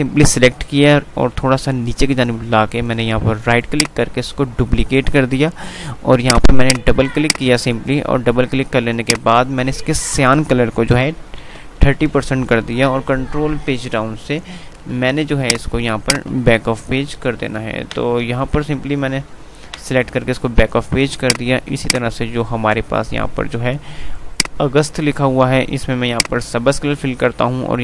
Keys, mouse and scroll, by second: 3.7 right click, 5.3 typing, 6.4 click, 13.5 Page_Down, 15.4 click, 17.3 ctrl+Page_Up, 17.5 ctrl+Page_Down, 18.9 ctrl+Page_Down, 21.3-24.2 drag, 24.2 right click, 26.2 click, 26.5 typing.